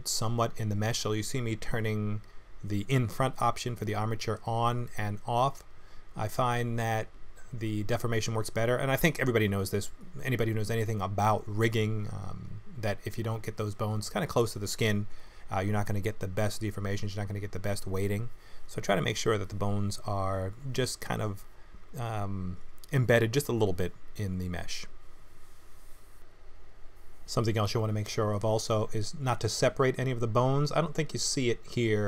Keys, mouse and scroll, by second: 0.6 g, 2.1 click, 2.5 middle click, 3.1 click, 4.2 click, 4.6 middle click, 5.1 g, 7.0 middle click, 8.1 g, 9.3 middle click, 10.2 click, 10.5 g, 11.7 click, 12.0 middle click, 12.8 g, 13.9 middle click, 14.9 click, 15.5 l, 16.1 middle click, 16.5 r, 19.6 click, 19.8 middle click, 21.2 middle click, 23.6 click, 23.9 click, 24.6 click, 24.9 click, 25.3 click, 26.0 middle click, 27.9 click, 28.3 middle click, 29.4 click, 30.2 KP_3, 31.1 g.